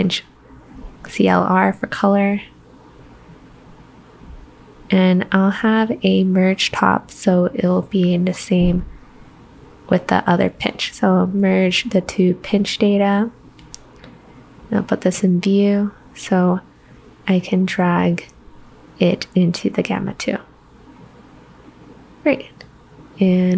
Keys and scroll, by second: 0.9-2.6 typing.